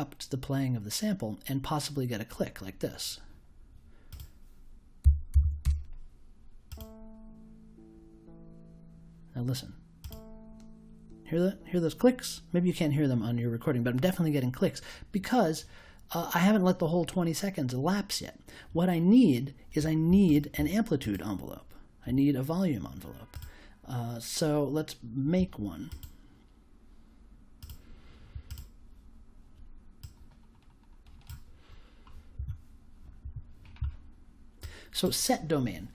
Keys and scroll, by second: 5.0 5, 5.3 0, 5.6 Return.